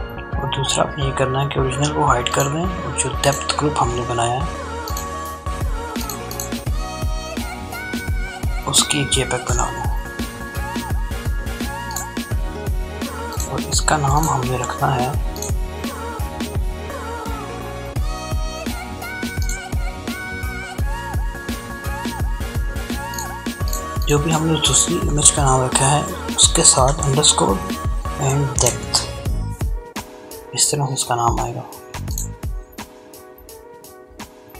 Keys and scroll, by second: 7.9 ctrl+shift+s, 25.2-27.4 typing.